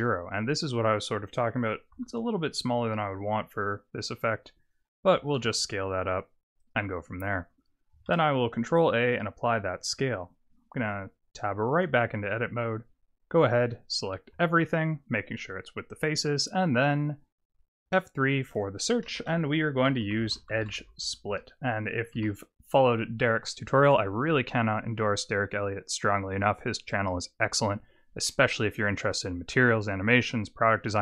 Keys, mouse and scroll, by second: 1.9 s, 5.2 g, 8.0 ctrl+a, 10.8 Tab, 14.3 a, 17.8 F3, 19.3 BackSpace, 28.3 middle click, 30.4-31.0 scroll up 1.